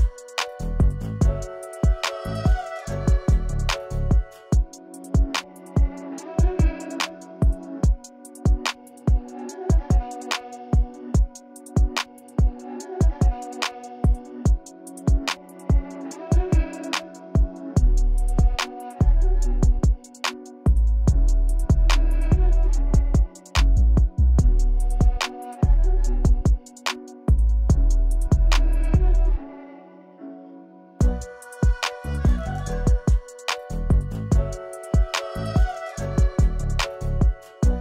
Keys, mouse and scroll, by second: 3.6 right click, 5.0 click, 5.0 click, 7.0 space, 7.5-7.9 click, 7.7 space, 10.9-11.9 drag, 13.8 click, 18.0 click, 20.3 click, 22.5 p, 26.1 click, 27.1 ctrl+z, 28.0 click, 28.5 ctrl+z, 32.1 ctrl+z, 32.3-32.7 click, 32.9 ctrl+z, 33.8 click, 36.2 ctrl+z, 36.9 ctrl+z, 37.4-37.8 drag.